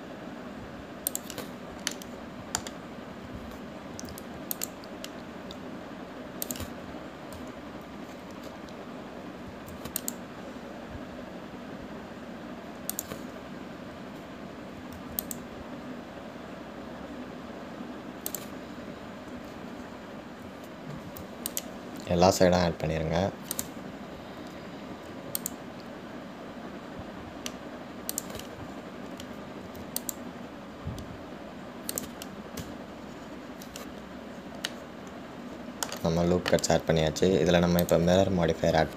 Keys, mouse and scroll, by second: 3.2-5.2 middle drag, 5.2 ctrl+r, 33.9 Tab, 34.2-35.9 scroll down 5, 35.9-38.9 middle drag.